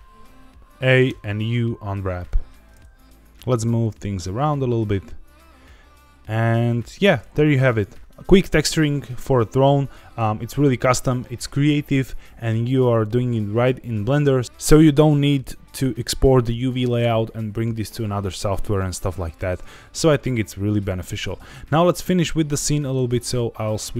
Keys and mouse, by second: 1.0 u, 3.0 a, 3.0 g, 3.0 z, 6.5 click, 6.8 Tab, 7.2-7.7 middle drag, 21.5 z.